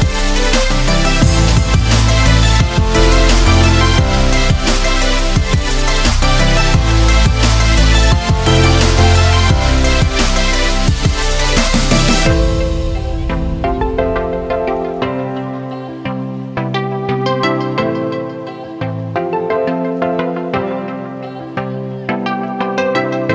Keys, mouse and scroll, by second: 1.0 ctrl+t, 3.2-8.3 alt+drag, 8.3-11.4 alt+drag, 11.4 alt+click, 15.7 l.